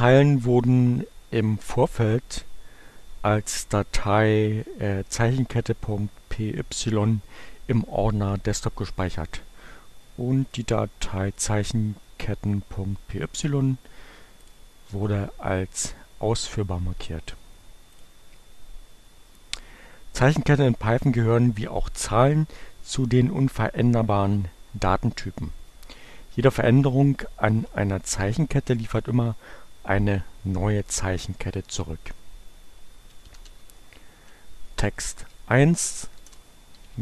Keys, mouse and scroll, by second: 10.2-11.5 right drag, 12.8-14.0 drag, 14.4 click, 17.9 click, 32.9-33.9 typing, 35.1 space, 35.9 shift+0, 36.0 shift+space, 36.9 shift+h.